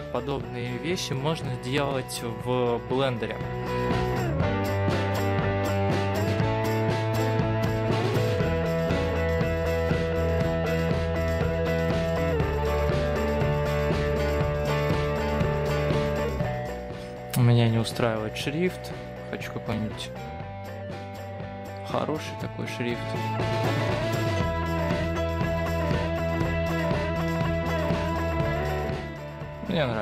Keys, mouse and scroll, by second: 5.7 shift+m, 5.9 o, 6.2 l, 8.4 space, 8.6 shift+3, 9.2 BackSpace, 9.8 3, 12.1 Return, 12.7 BackSpace, 13.0 Tab, 14.1 click, 14.9 Tab, 15.2 click, 16.2 shift+Left, 16.3 shift+Left, 16.9-18.2 scroll down 4, 18.2 click.